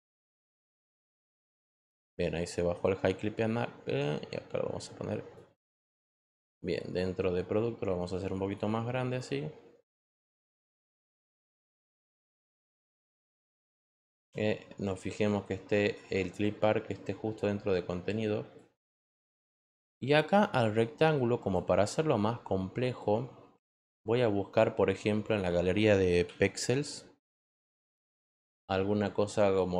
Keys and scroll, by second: 10.9 Return, 25.9-26.9 typing, 27.5 Return.